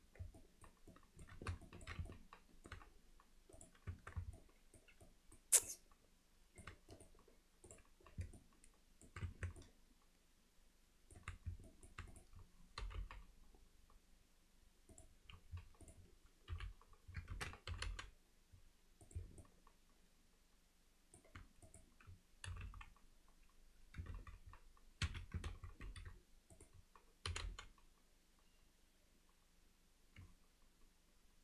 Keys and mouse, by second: 0.4 alt+middle drag, 0.9 alt+middle click, 1.7 ctrl+middle click, 2.1 alt+middle click, 3.6 click, 3.9 Tab, 4.4-4.8 alt+middle drag, 5.1 middle drag, 5.7-6.6 middle drag, 7.0-8.2 right drag, 8.4-9.1 alt+middle drag, 9.3 Tab, 9.6-11.2 alt+middle drag, 11.7 middle click, 17.4 ctrl+z, 17.7 g, 19.5-21.2 alt+middle drag, 21.7 click, 25.5 ctrl+z, 26.5 click, 27.3 g.